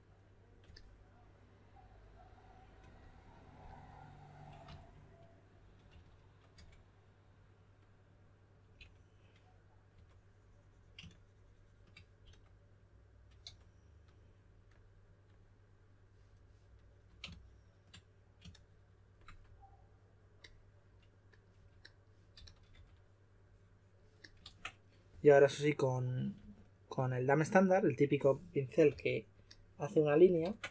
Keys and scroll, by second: 4.6 s, 5.9-6.5 typing, 8.7 typing, 9.9 typing, 12.2-13.9 typing, 21.5-22.7 typing, 24.4 super+z, 26.3 typing, 28.8 typing, 30.4 super+z.